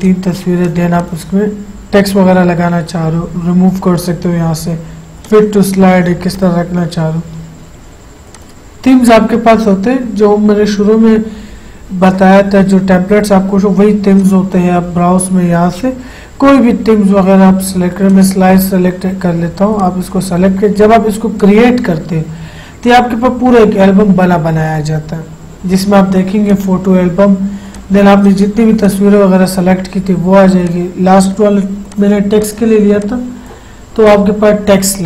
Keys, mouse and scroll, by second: 5.4 click, 8.5 click, 14.3 click, 14.4 click, 15.7-16.3 scroll down 1, 18.2 click, 26.7 click, 33.2 click.